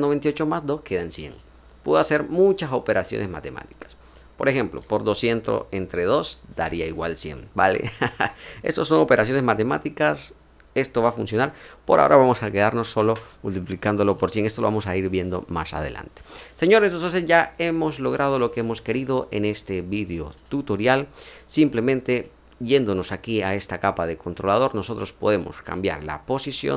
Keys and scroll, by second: 7.5 BackSpace, 8.1 BackSpace, 12.6 1, 12.9 0.